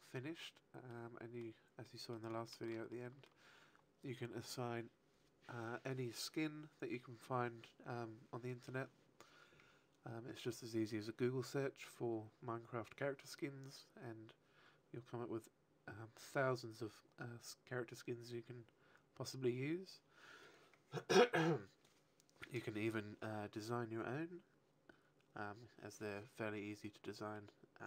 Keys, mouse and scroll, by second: 1.8 middle click, 2.4 shift+middle click, 2.8 middle click, 27.3 middle click.